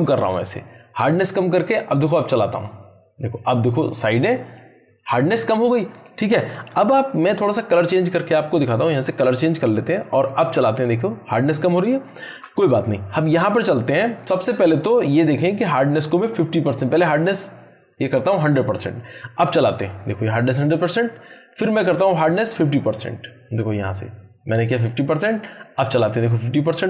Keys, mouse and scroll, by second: 6.5 ctrl+Num_Lock, 6.5 click, 6.7 ctrl+z, 8.6-9.2 drag, 12.3 ctrl+z, 13.4 click, 15.9-17.5 drag, 19.6 click, 19.6-20.5 drag.